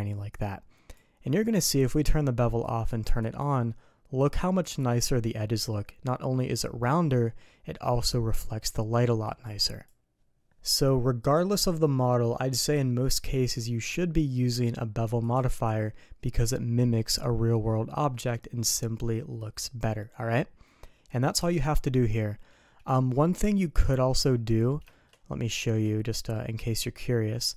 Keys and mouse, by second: 2.6 click, 3.2 click, 4.1 click, 4.6 click, 9.2 click, 9.6 click, 10.6 middle click, 15.2 click, 15.5 click, 22.1-23.8 middle drag, 24.3 middle click, 24.9 shift+click, 25.5 shift+click.